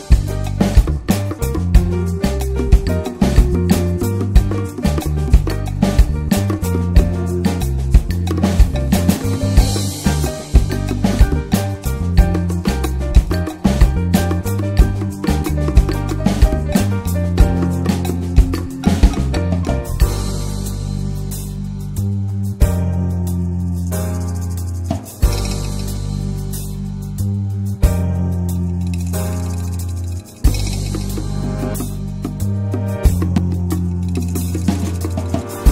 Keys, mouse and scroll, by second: 0.4-1.2 middle drag, 1.2 scroll up 1, 1.3 click, 1.9 ctrl+1, 2.1 click, 2.4-3.4 middle drag, 3.4 ctrl+s, 3.6-5.0 drag, 5.0 middle click, 5.6 ctrl+s, 7.0-8.9 drag, 11.7-15.8 drag, 15.8-16.4 middle drag, 16.4-17.8 scroll up 3, 17.8-18.3 scroll up 1, 18.3 click, 18.7 click, 19.7-20.4 scroll down 2, 20.4-21.0 scroll down 1, 21.0-21.8 middle drag, 21.8 scroll down 1, 21.9 middle click, 22.1-23.1 scroll up 3, 22.4 middle click, 23.1-25.4 drag, 25.4-26.2 middle drag, 26.2-31.6 drag, 33.7 click, 33.9 scroll down 1, 34.0-34.4 middle drag, 34.4 scroll up 2, 34.5-35.1 middle drag, 35.1 scroll up 1, 35.2 ctrl+s, 35.5-35.7 middle drag.